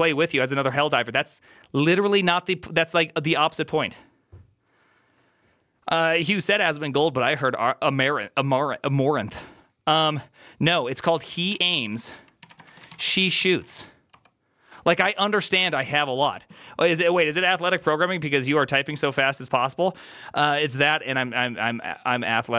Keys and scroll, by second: 11.5-14.0 typing.